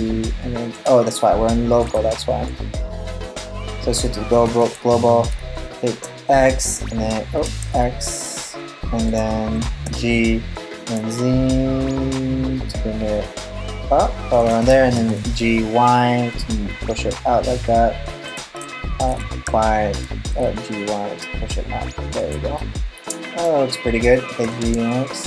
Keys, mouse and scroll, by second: 1.4 click, 3.9 g, 7.0 g, 9.4 g, 14.5 g, 19.0 y, 20.0 g, 22.2 middle click, 23.3-24.0 scroll down 1, 24.0 g.